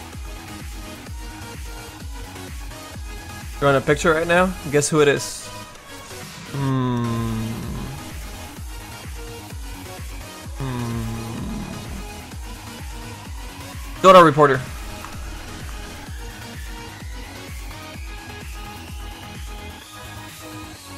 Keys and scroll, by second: 17.5 s, 18.9 x, 19.5 s.